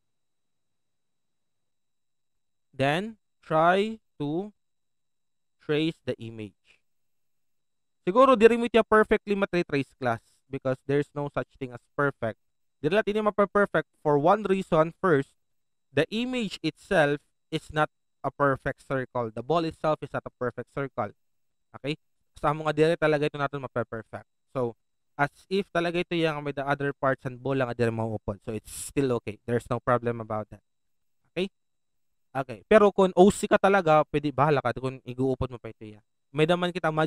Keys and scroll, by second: 2.3 alt+shift+space.